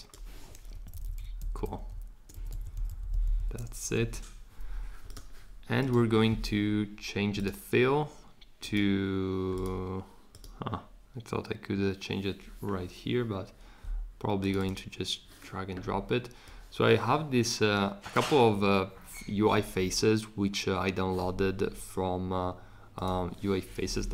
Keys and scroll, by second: 0.7 shift+Down, 0.9 shift+Down, 1.1 shift+Down, 1.3 shift+Up, 1.6 shift+Up, 1.8 shift+Up, 2.3 Down, 2.5 Down, 2.8 Down, 3.0 Down, 3.1 Down, 3.2 Down, 3.3 Down.